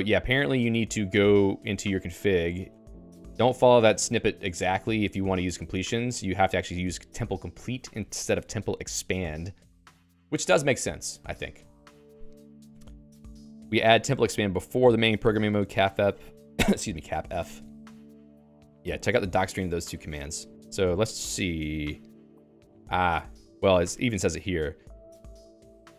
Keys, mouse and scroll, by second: 0.0-0.4 typing, 2.7 Return, 3.2 Escape, 3.7 k, 4.9-7.7 typing, 13.3-14.7 typing, 17.4 Escape, 18.4 ctrl+g, 18.5 Escape, 18.7 Escape, 20.7-24.3 typing.